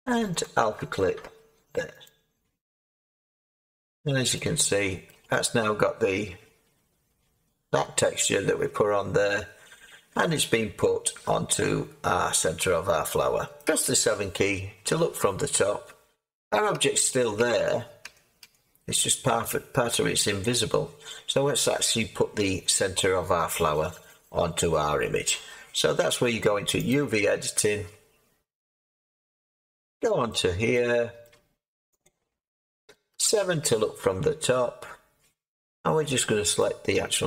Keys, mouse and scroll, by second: 5.0-5.6 scroll, 5.6-16.3 middle drag, 13.6 7, 16.3-16.7 scroll, 16.7 Tab, 17.4 Tab, 18.0 Tab, 18.4 Tab, 26.9-28.9 drag, 28.9 Tab, 30.3-32.0 middle drag, 32.0-33.1 drag.